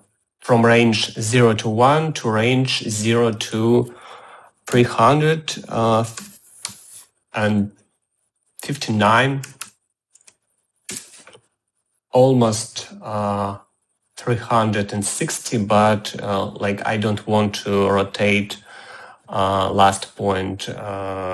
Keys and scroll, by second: 5.4 3, 6.4 5, 6.9 9, 9.2 ., 9.6 9, 11.1 Return.